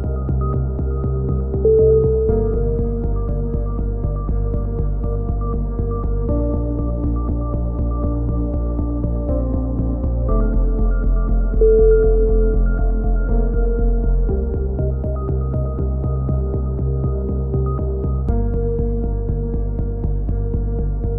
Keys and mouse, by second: 10.6-13.5 typing, 13.2 ctrl+n, 13.8 Tab, 14.2 middle drag, 18.4-19.0 middle drag.